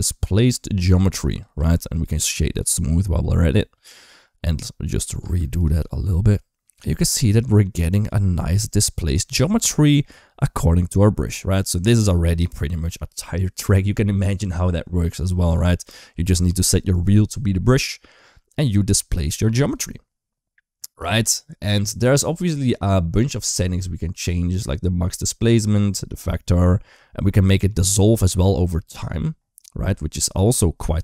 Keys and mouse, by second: 1.4 space, 1.7 click, 2.0 right click, 4.7 click, 5.1 space, 5.4 click, 5.7 g, 11.8 space, 12.3 shift+middle click, 17.4 middle click, 19.4 click, 27.6 click, 28.8 click.